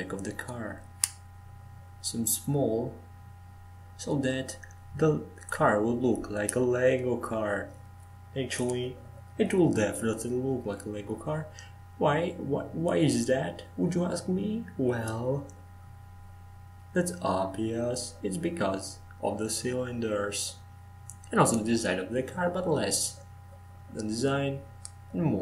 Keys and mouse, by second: 4.2-6.4 drag, 4.9 s, 9.4 Tab, 9.9 Tab, 10.4 Tab, 11.7 f, 12.7 e, 15.0 Tab, 17.3-20.3 drag, 20.8-24.3 drag, 24.3 shift+d.